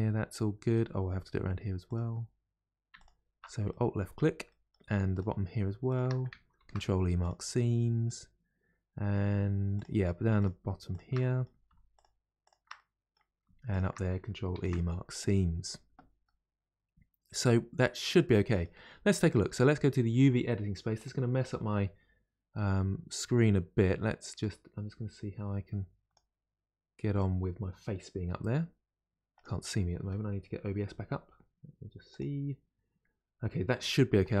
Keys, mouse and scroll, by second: 1.8 click, 3.0 alt+click, 3.7-5.1 middle drag, 5.1 shift+click, 5.9 shift+click, 6.6 ctrl+e, 7.2 ctrl+e, 7.6-9.8 middle drag, 9.8 click, 10.4 shift+click, 10.9 shift+click, 11.2 middle click, 12.0 shift+click, 12.4 shift+click, 12.8 middle click, 13.7 shift+click, 14.5 ctrl+e, 15.2 ctrl+e, 16.2-17.6 middle drag, 17.6-18.1 scroll down 2, 18.1-21.0 middle drag, 21.0-22.1 drag.